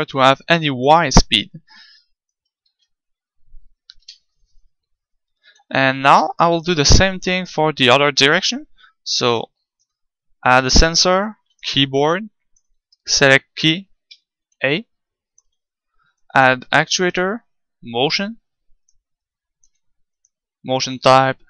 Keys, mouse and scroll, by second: 0.0-1.8 drag, 2.6 ctrl+z, 4.0 KP_1, 11.6-21.4 drag.